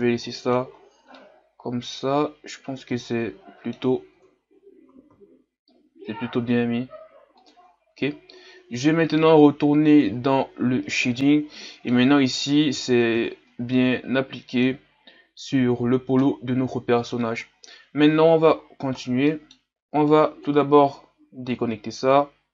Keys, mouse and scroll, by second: 0.0-0.3 scroll down 1, 0.3 middle click, 0.6-1.2 scroll up 6, 1.2-4.2 middle drag, 4.2 Tab, 4.9 s, 10.1-11.6 drag, 11.6 middle click, 12.2-12.6 scroll up 4, 12.6 a, 13.3-13.7 scroll down 2, 13.7-14.9 middle drag, 14.9-15.8 scroll up 2, 15.8-16.2 scroll down 1, 16.2-17.2 middle drag, 17.2 scroll up 1, 17.4-20.1 scroll down 2, 20.1-22.1 scroll down 1, 22.1 click.